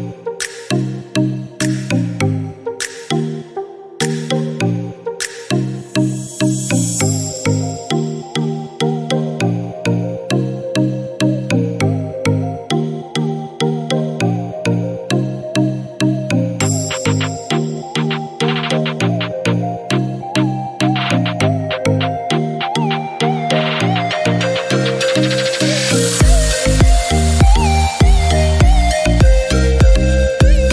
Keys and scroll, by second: 13.6 1, 14.1 Return.